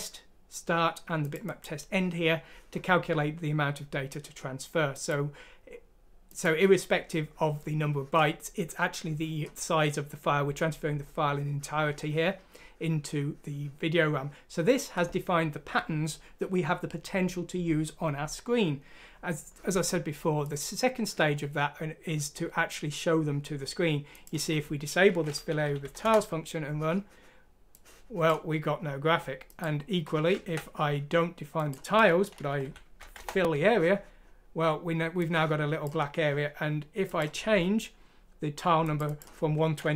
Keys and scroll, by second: 25.6 ;, 25.8 F6, 26.0 Return, 30.4 ctrl+z, 32.6 ;, 33.0 F6, 33.2 Return.